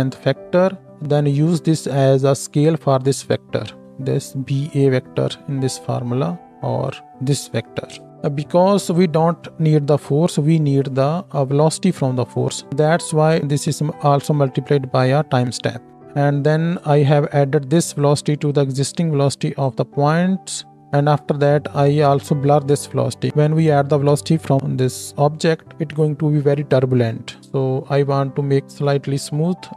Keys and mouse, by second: 1.3-3.6 middle drag, 1.3-3.6 right drag, 6.9-8.1 middle drag, 8.1-29.7 drag, 10.0-29.7 middle drag, 10.0-29.7 right drag.